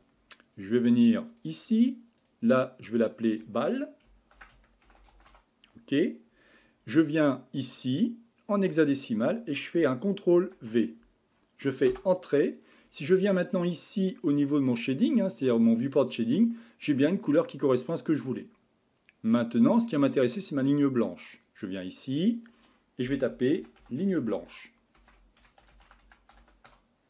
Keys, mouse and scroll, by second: 1.3 click, 2.2-5.0 drag, 5.0 l, 7.4 click, 15.9 click, 16.5-19.6 middle drag, 20.0-22.3 drag, 22.4-25.6 drag.